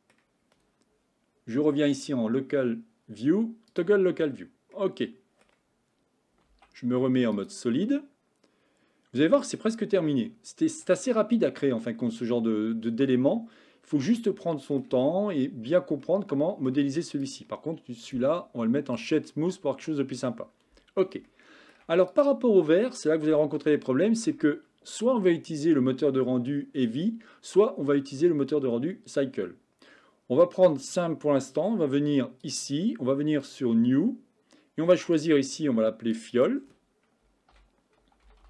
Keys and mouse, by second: 2.1-3.8 drag, 4.8-5.5 middle drag, 6.5 z, 8.0-9.7 middle drag, 10.1-10.7 shift+middle drag, 11.7-12.2 shift+middle drag, 13.3-14.1 middle drag, 14.5-14.9 shift+middle drag, 16.1-16.7 shift+middle drag, 17.3 click, 18.1-19.1 right drag, 21.3-21.8 shift+middle drag, 22.1 click, 23.8-24.3 shift+middle drag, 32.5 click, 33.6-36.0 drag, 36.2 click, 36.4 click.